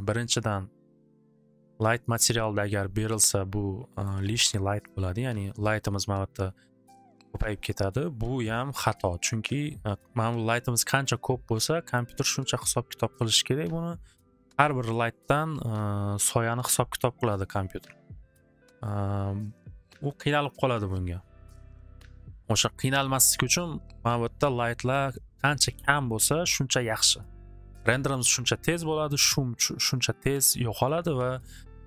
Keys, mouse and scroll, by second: 4.1 middle click, 4.9 click.